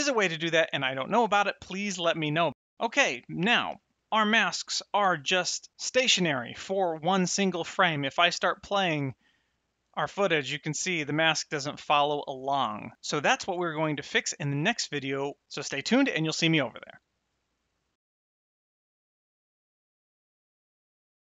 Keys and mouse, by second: 3.6 Tab, 5.1 middle click, 7.8 click, 14.1 shift+Left.